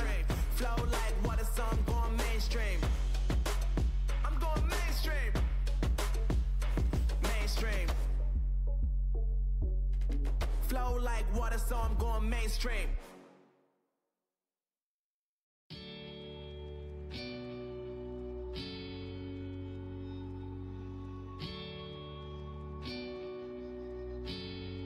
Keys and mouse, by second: 1.2 f, 2.6 f, 4.0 ctrl+z, 4.5 z, 11.6 w, 14.7 a, 14.8 a, 16.9 f, 17.3 f, 17.8 z, 19.4 Tab, 20.0 Tab, 21.5 ctrl+r.